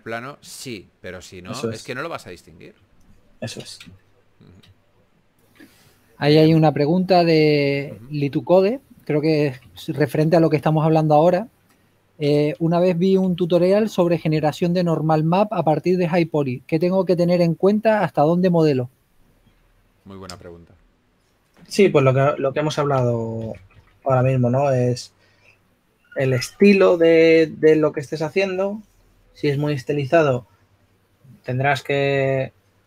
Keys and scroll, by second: 6.8 3, 9.5-10.9 typing, 13.3 typing, 14.7-15.3 typing, 20.4 4, 23.1-24.7 typing.